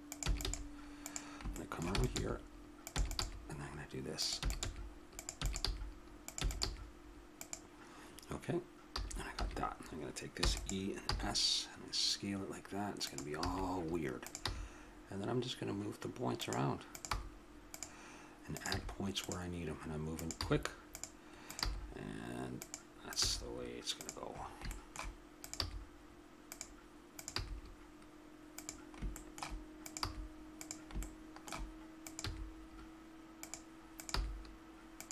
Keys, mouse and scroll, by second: 0.0-0.4 typing, 1.9 e, 2.2 g, 3.0 e, 3.2 g, 4.4-6.6 typing, 8.9 a, 9.3 a, 10.4 e, 11.0 s, 13.4 a, 14.2 right click, 14.4 g, 17.1 g, 18.7 g, 20.4 g, 21.6 g, 23.1 click, 23.2 g, 24.4 middle click, 25.4-26.5 right drag, 25.6 g, 27.3 g, 29.8-31.0 drag, 30.0 g, 31.4-32.6 drag, 32.3 g, 34.1 g.